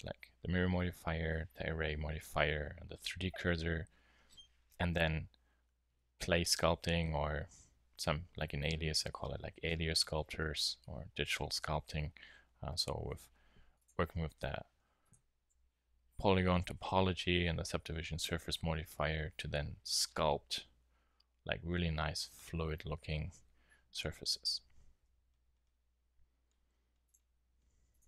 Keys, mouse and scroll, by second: 4.6 KP_3, 5.9-6.6 KP_6, 6.9 KP_8, 7.0 KP_8, 14.0 Tab, 14.7 Tab, 15.5 Tab, 23.9 KP_1, 24.9 Tab.